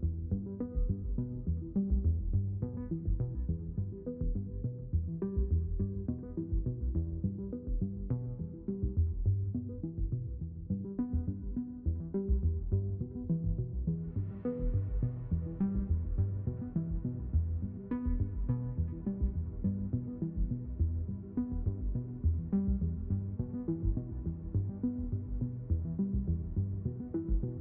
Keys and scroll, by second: 9.5 3, 11.0 3, 16.1 space, 17.1 x, 20.3 space, 22.4 ctrl+alt+x, 25.2 ctrl+alt+x.